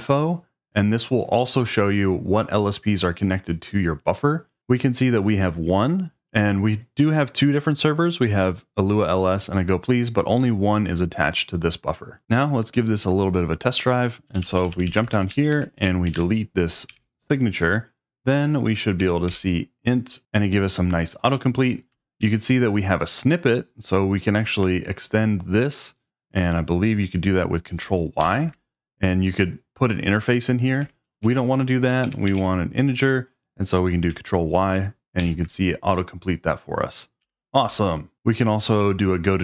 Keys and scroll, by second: 14.3-16.8 typing, 18.8-19.7 typing, 22.2 Page_Up, 28.2 ctrl+y, 30.8 Escape, 31.2-32.8 typing, 35.2 ctrl+y, 37.2 j, 37.5 j.